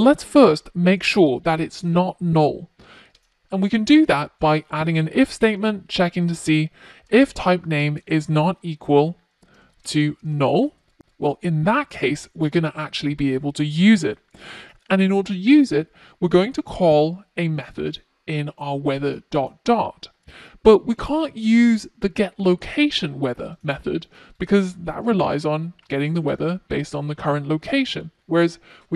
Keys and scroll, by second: 4.0 Return.